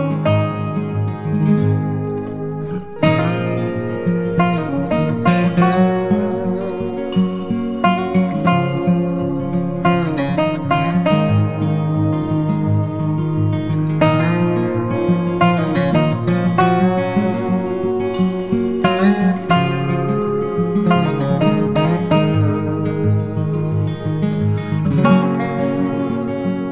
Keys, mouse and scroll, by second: 1.5 ctrl+t, 2.2 alt+shift+click, 6.3 alt+shift+click, 10.6 Return, 11.0 Up, 11.2 Up, 11.5 Right, 11.8 Down, 11.9 Down.